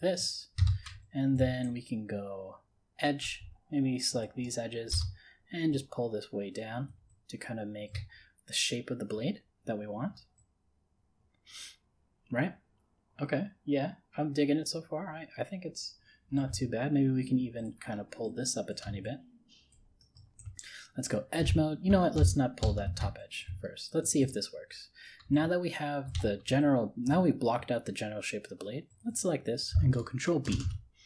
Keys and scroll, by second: 22.2 ctrl+z, 30.5 ctrl+b.